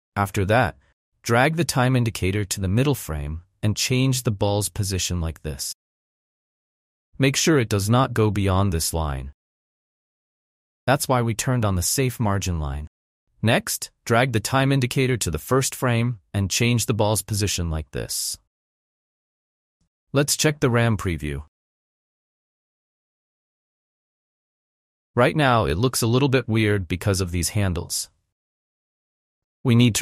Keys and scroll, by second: 20.5 n, 21.0 space, 25.0 space.